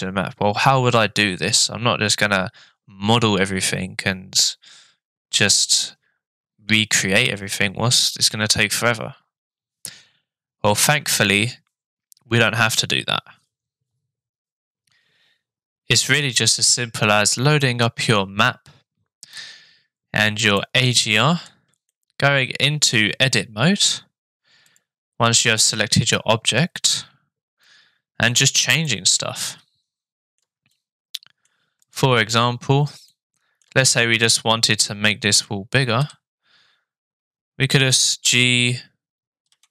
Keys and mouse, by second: 20.6 middle click, 22.0-23.0 shift+middle drag, 26.9 Tab, 27.7 middle click, 28.9 middle click, 29.5 shift+middle click, 30.8 middle click, 33.1 shift+middle click, 36.0 a, 37.8 g.